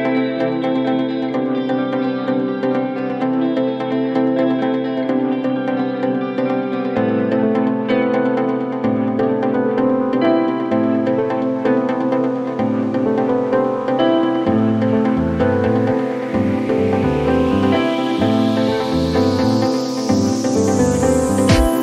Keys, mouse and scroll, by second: 2.0-3.6 click.